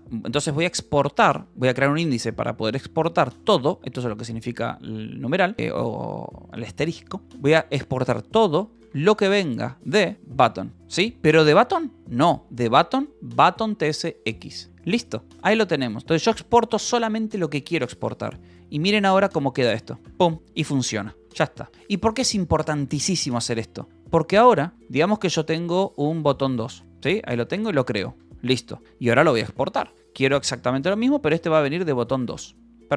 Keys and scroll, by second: 3.7 Right, 4.4 Right, 8.8-10.8 typing, 10.2 Return, 10.5 Escape, 12.3 /, 14.2 ctrl+n, 14.2 Return, 14.5 Escape, 14.9 ctrl+s, 15.0-16.1 typing, 16.6 Return, 19.0 ctrl+j, 19.0-21.5 typing, 23.5 ctrl+i, 23.9-32.9 typing, 28.8 Return, 32.7 ctrl+s.